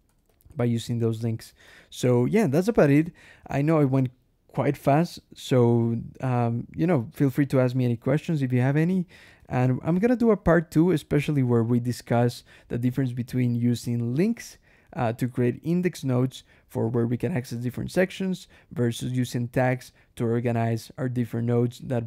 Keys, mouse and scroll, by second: 0.1 k, 0.6 j, 1.1 ctrl+shift+l, 1.5 ctrl+shift+Escape, 1.8 ctrl+shift+k, 2.0 ctrl+shift+j, 9.2 Escape, 9.5 g, 9.8 Escape, 10.1 j, 10.7 d, 11.0 Escape, 14.2 Escape, 14.4 k.